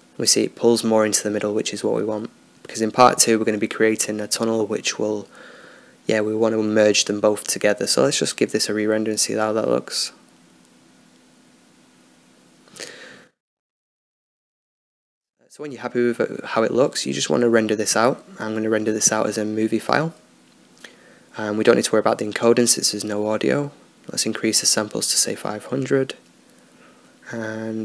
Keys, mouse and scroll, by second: 3.6-5.1 drag, 5.1-7.0 middle drag, 8.0-21.5 drag, 22.1-27.8 drag.